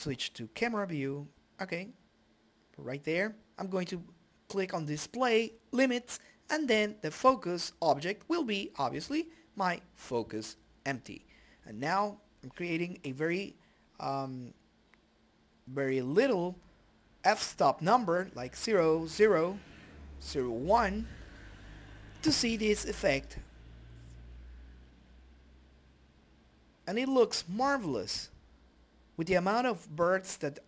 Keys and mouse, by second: 2.4-7.4 drag, 9.0 click, 15.4-16.9 middle drag, 16.4 right click, 17.2 click, 17.5 a, 20.7 right click, 21.4 g, 22.1 right click, 22.6 KP_Decimal, 24.1 click, 25.3 middle click, 26.2 s, 27.2 click, 27.6 ctrl+space, 28.4 click, 29.9 click.